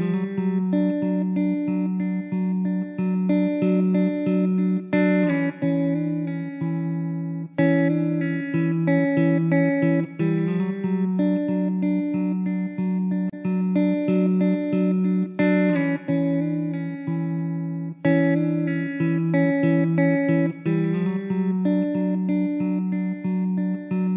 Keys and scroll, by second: 0.2 Delete, 2.5 Tab, 2.7 `, 3.2 1, 4.6 Tab, 7.0 `, 8.9 shift+d, 14.0 Tab, 14.2 1, 15.8 shift+Tab, 17.2 alt+z, 18.9 KP_0, 20.8 shift+a, 22.6 s.